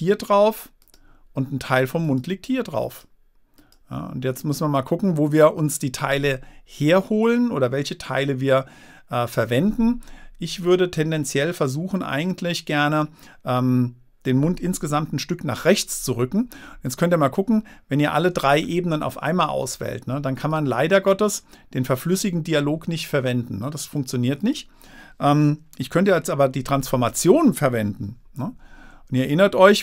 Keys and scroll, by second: 26.3 super+t, 28.8 super+-.